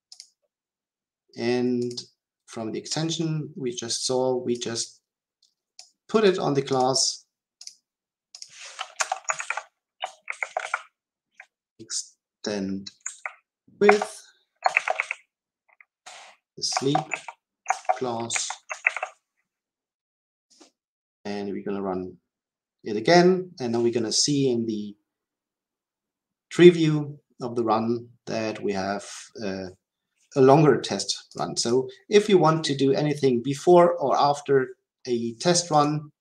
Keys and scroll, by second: 13.8 Return, 20.4 shift+F10.